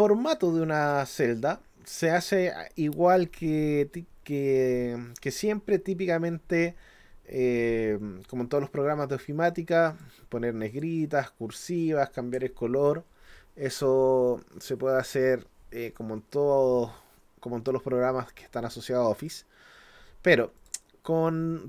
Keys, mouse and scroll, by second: 0.8 click, 9.9 click, 10.7 click, 19.3 click, 20.6 click.